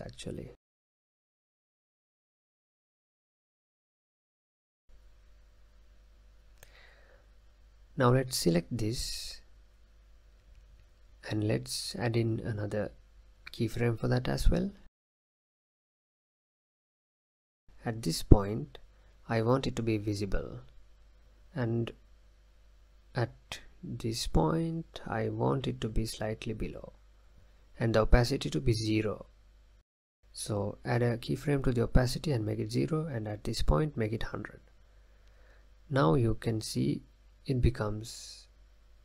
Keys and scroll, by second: 1.7 space, 4.4 space, 5.4 space, 6.0 space, 16.2 ctrl+z.